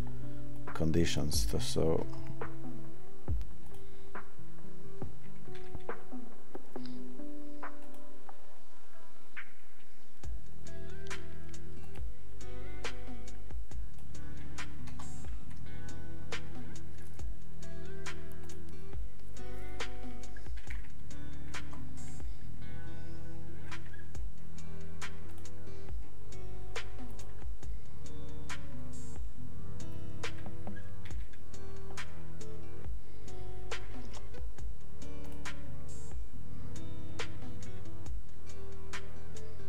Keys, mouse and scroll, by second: 18.4 click, 35.2 click.